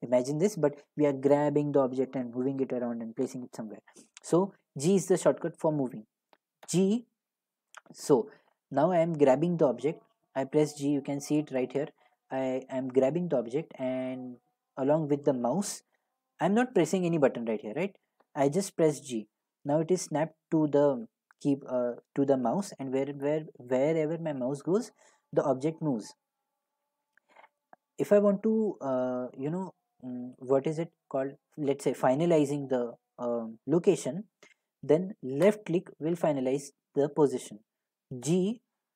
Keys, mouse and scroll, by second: 6.8 g, 35.5 click, 38.2 g.